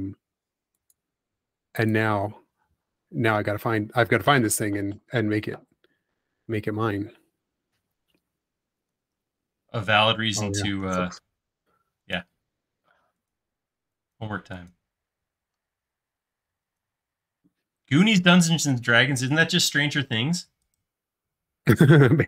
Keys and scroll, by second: 9.6 space, 11.0 l, 13.8 e, 17.6 space.